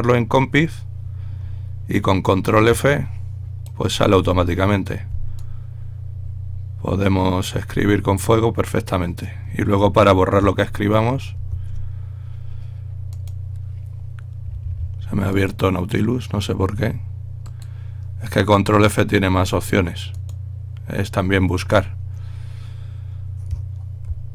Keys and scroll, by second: 5.1 f, 12.0 ctrl+a, 24.2 ctrl+f.